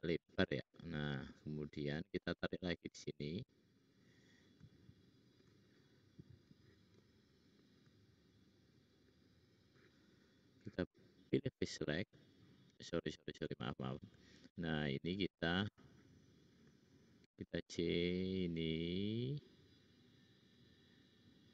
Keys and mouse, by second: 0.7 click, 1.7 click, 1.9 middle click, 1.9 right click, 4.7 shift+click, 6.4-7.7 middle drag, 8.6 shift+click, 9.0 shift+click, 10.3-11.1 drag, 10.3-11.1 right drag, 11.2 click, 11.6-12.0 shift+drag, 14.3 shift+click, 17.1 c.